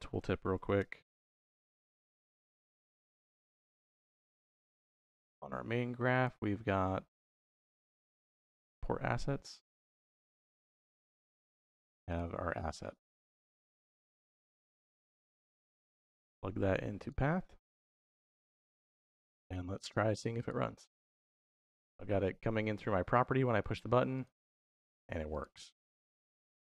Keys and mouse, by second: 1.4 s, 3.6-5.2 drag, 5.9-8.4 drag, 11.1 click, 15.0-17.0 drag, 19.3 click, 19.9 x, 25.5 x, 26.3 x.